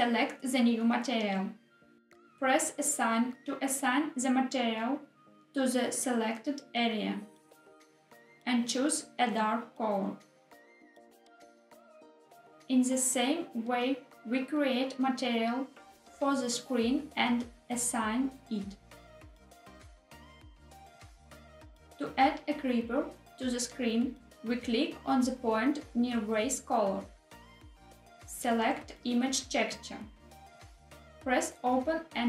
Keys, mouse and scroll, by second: 0.8 click, 3.1 click, 6.0 click, 10.6 click, 12.9 click, 13.6 click, 16.5 scroll up 1, 16.7 scroll down 1, 16.9 click, 17.3 shift+click, 17.7 shift+click, 17.9 shift+click, 18.2 shift+click, 19.8 click, 21.4 Tab, 27.1 click, 30.7 click, 32.2 click.